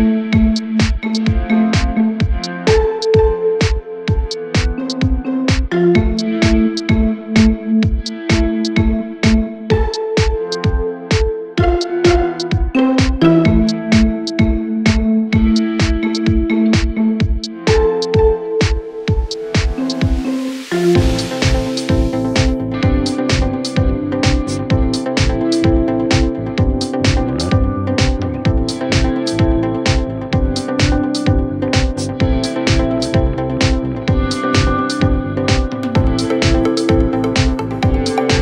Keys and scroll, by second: 37.7 ctrl+z.